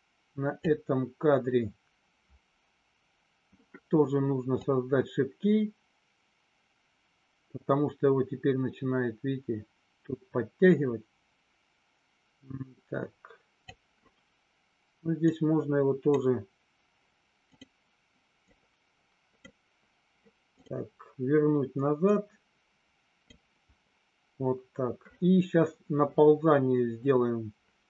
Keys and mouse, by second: 4.6-13.7 drag, 15.2-17.6 drag, 18.6-20.6 drag, 22.2-23.4 drag.